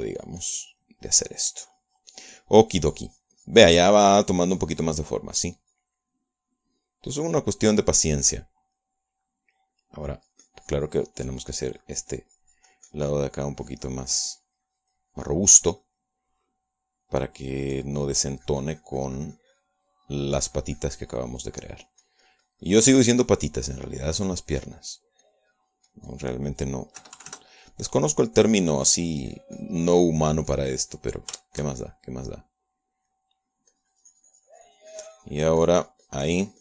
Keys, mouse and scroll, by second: 7.3-8.3 middle drag, 8.5-9.7 middle drag, 9.9-11.1 middle drag, 11.2-18.8 drag, 17.1-18.8 middle drag, 24.7 middle click, 25.2 scroll down 2, 25.3 middle click, 26.3-27.4 drag, 28.1 KP_Add, 28.7-32.3 drag, 32.5-34.7 shift+middle drag, 34.8-36.6 drag.